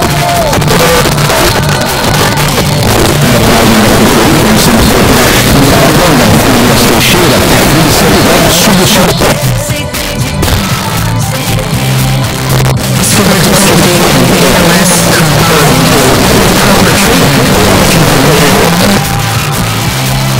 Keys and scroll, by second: 9.1 Page_Down, 18.7 Page_Down.